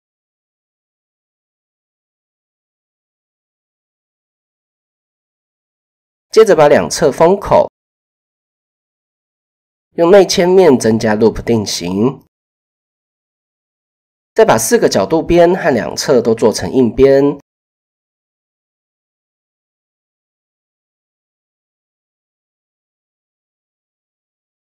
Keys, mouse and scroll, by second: 1.0 click, 1.6 KP_7, 2.5 shift+click, 4.0 click, 4.9 shift+click, 5.6 middle click, 6.2 click, 8.4 f, 9.1 click, 10.2 i, 11.9 click, 13.2 shift+click, 14.5 click, 16.6 alt+shift+click, 17.3 middle click, 18.4 middle click, 20.4 middle click, 21.4 middle click, 22.7 middle click, 23.3 alt+click, 24.4 alt+click.